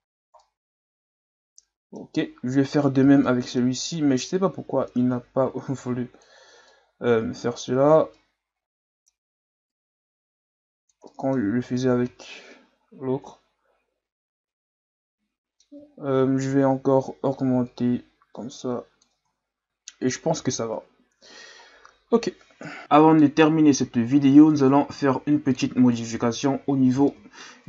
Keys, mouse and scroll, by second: 0.1-0.4 scroll down 2, 0.4-2.1 middle drag, 2.1-2.7 scroll up 2, 2.7 right click, 3.0 Tab, 3.2-4.3 middle drag, 4.3-6.7 drag, 6.7-9.7 middle drag, 9.7-11.1 drag, 11.1 middle click, 11.5 Tab, 11.9 a, 12.2-15.3 middle drag, 15.9-16.4 scroll down 2, 16.4 scroll up 1, 16.6 Tab, 17.7-19.2 drag, 19.2 Tab, 19.6-20.7 middle drag, 20.7 KP_Divide, 21.6-22.6 scroll down 6, 22.6 KP_1, 26.0-26.6 middle drag, 26.6-27.1 scroll up 1, 27.1-27.6 shift+middle drag.